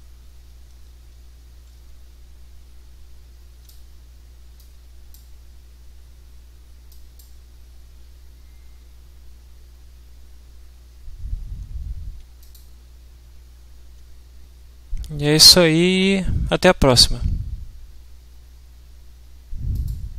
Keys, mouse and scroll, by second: 0.3 w, 2.8 s, 4.5-5.3 drag, 6.9 click, 12.4 click, 19.7 click.